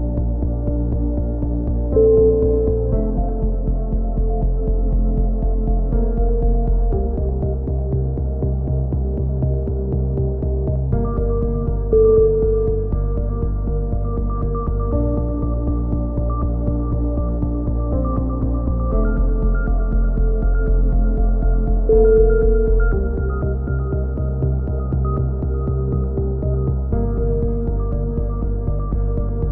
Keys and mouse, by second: 0.1 click, 0.9-2.1 middle drag, 2.1 ctrl+z, 3.5 ctrl+z, 3.5-4.8 middle drag, 4.8 ctrl+z, 5.7 click, 6.2 z, 6.8-9.1 right drag, 8.6 KP_7, 9.3 z, 10.2 right click, 11.9 a, 12.3 right click, 13.5 z, 14.0 z, 14.6 z, 15.0 click, 16.6 right click, 17.3 click, 17.3 KP_7, 18.1 z, 19.1-20.9 middle drag, 22.3 z, 23.4-24.6 middle drag, 23.9 a, 24.6 click, 26.3 ctrl+z, 26.6 ctrl+z, 26.9 middle click, 28.0-29.5 middle drag.